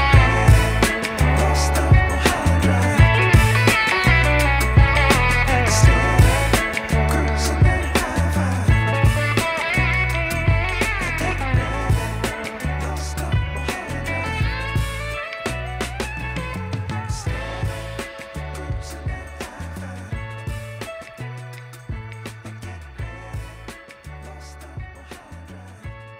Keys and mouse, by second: 0.0-0.4 typing, 0.2 click, 1.2 click, 2.2-4.5 typing, 2.9 click, 3.6 click, 4.6 click, 5.9 click, 6.5-12.4 typing, 6.9 click, 7.8 click, 8.7 click, 9.7 click, 10.4 click, 11.1 click, 12.3 click, 14.1-18.4 typing, 14.3 click, 15.3 click, 16.4 click, 17.4 click, 18.5 click, 19.3 ctrl+super+z, 19.8 ctrl+z, 20.3 click, 22.4 space, 22.5 click, 22.9 space, 23.5 b, 24.0 click, 24.1 [, 24.9 click, 25.4-26.1 typing, 25.8 click.